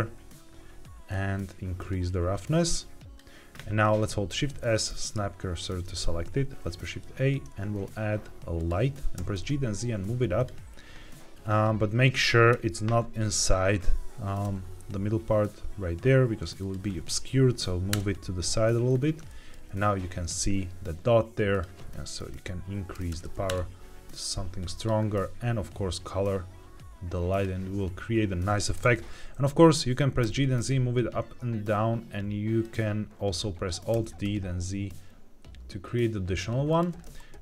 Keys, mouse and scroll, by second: 1.0-1.7 scroll up 1, 1.7-3.1 drag, 4.0 shift+s, 6.5 shift+a, 9.1 g, 9.3 z, 10.3 click, 12.4 KP_7, 14.3 g, 16.5-17.8 drag, 17.8 KP_0, 18.8 scroll down 2, 19.2 shift+middle click, 21.4-23.4 drag, 23.1 KP_0, 24.7 click, 28.7 KP_1, 30.1 g, 30.3 z, 32.5 click, 33.8 alt+d, 34.1 z, 36.6 drag, 36.9-37.4 middle drag.